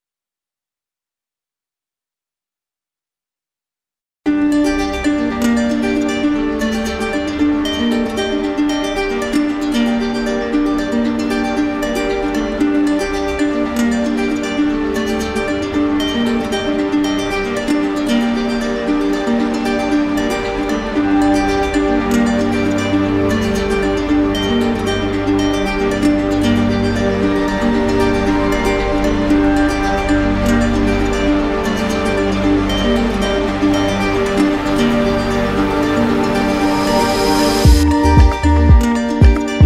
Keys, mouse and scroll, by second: 1.0 click, 3.2 click, 7.3 click, 9.9 click, 10.2 ctrl+z, 12.4 click, 14.3 typing, 15.3-15.8 typing, 16.4 Return, 18.0-19.0 drag, 25.0-26.1 drag, 27.2 click, 28.5 click, 29.5 click, 30.0 shift+click, 30.6 shift+click, 37.1 z, 38.7-39.6 drag.